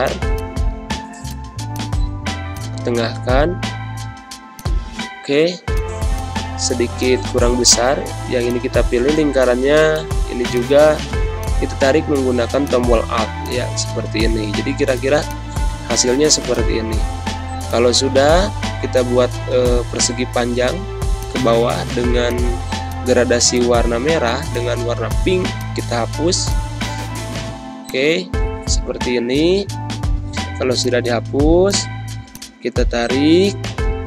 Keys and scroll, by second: 3.4 ctrl+-, 4.3 space, 15.0 space, 28.7 g.